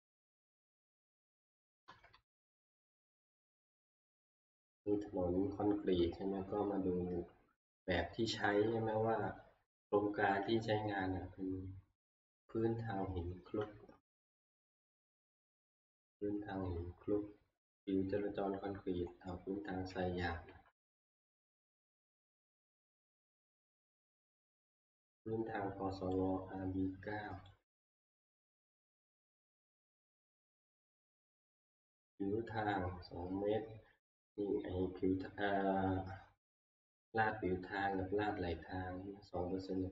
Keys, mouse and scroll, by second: 0.7 Left, 0.9 Left, 1.6-3.1 drag, 1.9 Left, 2.2 Left, 2.4 Left, 5.9 scroll, 7.1 Right, 8.0 scroll, 9.0 scroll, 12.4 click, 14.9 ctrl+scroll, 19.1 ctrl+scroll, 25.4 Right, 27.4 click, 28.6 ctrl+scroll, 28.9 middle click, 38.7-39.2 ctrl+scroll, 39.2 ctrl+scroll.